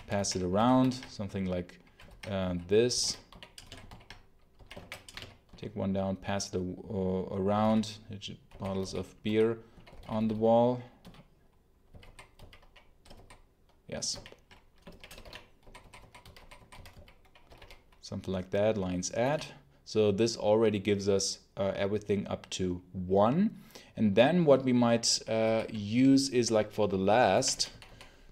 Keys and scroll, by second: 0.7 ctrl+super+l, 3.8 ctrl+l, 4.2-5.9 typing, 7.1-12.7 typing, 14.0 ctrl+super+l, 14.5-17.9 typing, 19.1 j.